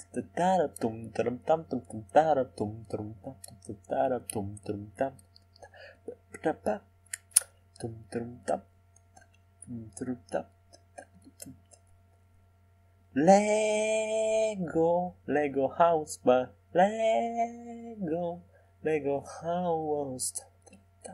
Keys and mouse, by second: 3.2-6.0 middle drag, 6.0-7.7 drag, 8.7-10.5 drag, 12.6 s.